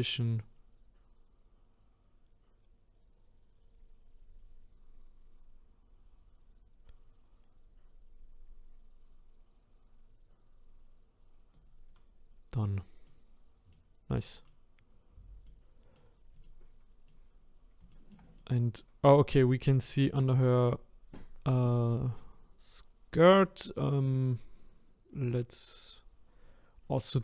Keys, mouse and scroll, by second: 13.0-17.4 middle drag, 17.4-17.9 scroll up 3, 17.9-26.2 shift+middle drag, 26.2 click.